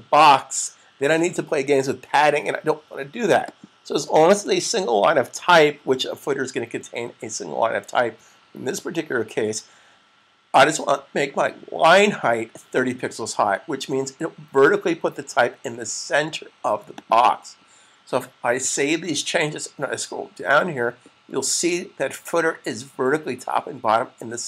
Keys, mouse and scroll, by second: 3.2 click, 12.6 click, 17.1 click, 18.5 super+s.